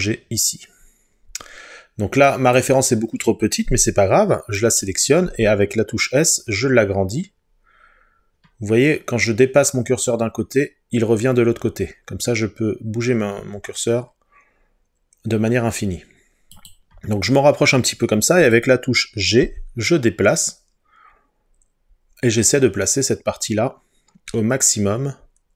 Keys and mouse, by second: 5.3 s, 16.6 click, 18.6 click, 19.5 g.